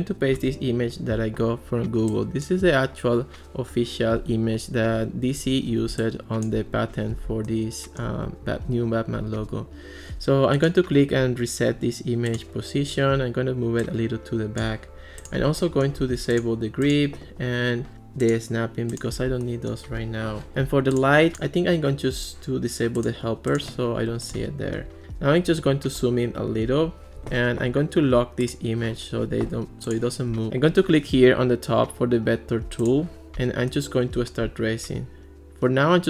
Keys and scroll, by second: 0.4 super+v, 24.7 alt+r.